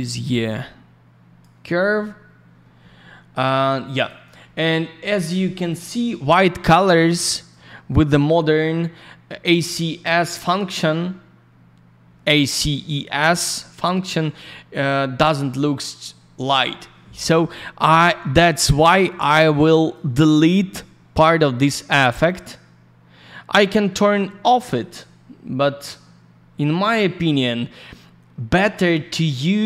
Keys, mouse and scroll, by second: 0.4 click, 3.9 click, 4.0 click, 5.0 scroll up 1, 6.1-7.4 scroll down 1, 7.4 click, 9.9 scroll down 1, 13.6-14.0 scroll down 1, 19.8 click, 19.9 click, 22.2 click.